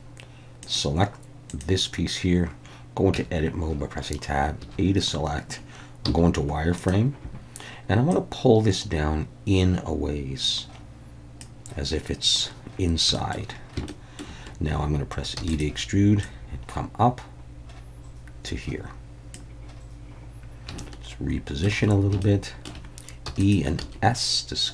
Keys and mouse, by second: 0.6 click, 1.5 click, 3.1 Tab, 4.6 a, 6.1 z, 8.1-11.4 drag, 13.2 shift+middle click, 14.0 shift+middle click, 15.4 e, 15.5-19.3 drag, 20.8-21.8 shift+middle drag, 22.2 shift+middle click, 23.3 e, 23.4 click, 23.8 s.